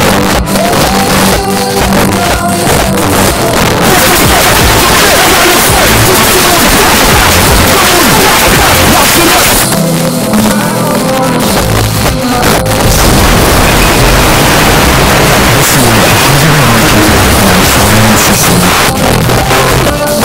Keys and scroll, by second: 9.6 Page_Down, 18.7 Page_Down.